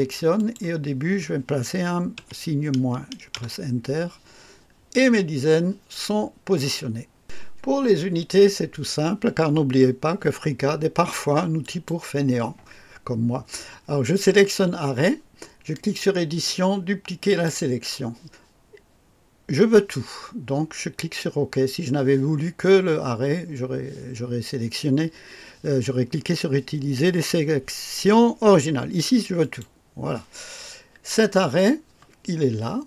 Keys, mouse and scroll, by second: 0.3 click, 2.1 typing, 3.3 Return, 3.4 KP_Enter, 11.6 click, 15.7 click, 17.3 click, 29.4 click, 31.4 click.